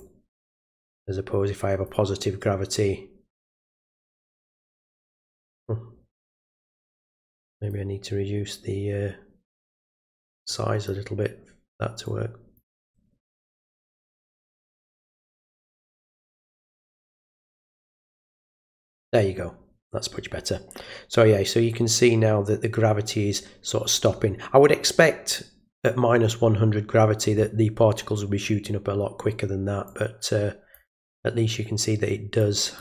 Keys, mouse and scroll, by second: 0.0-1.9 drag, 3.6 click, 7.2 click, 10.5 click, 12.0 click, 14.4 click, 17.8 click, 29.9 click, 32.4 click.